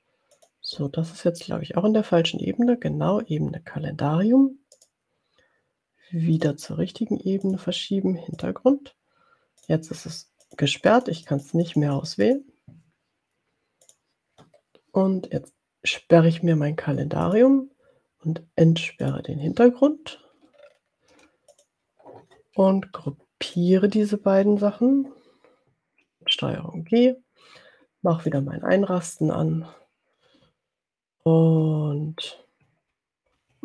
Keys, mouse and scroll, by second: 0.7 click, 4.9 click, 6.4 click, 7.8 click, 8.4 click, 9.8 click, 10.5-12.9 drag, 14.0 click, 17.3 click, 19.3 click, 20.6-21.3 ctrl+scroll down 2, 21.5 click, 23.6 shift+click, 25.7 ctrl+g, 28.5 click, 29.5 middle click, 30.7-31.7 ctrl+scroll down 4.